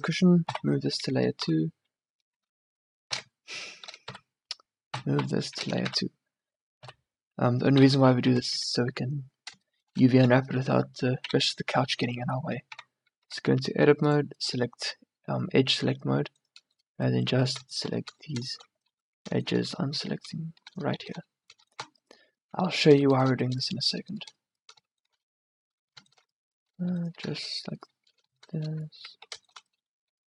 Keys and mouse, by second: 0.5 m, 1.5 1, 1.5 2, 3.1 z, 4.1 1, 4.9 m, 6.9 m, 7.9 2, 8.4 z, 8.7 a, 10.8 1, 11.4 2, 12.8 Tab, 13.3 a, 21.7 click, 29.1 ctrl+z.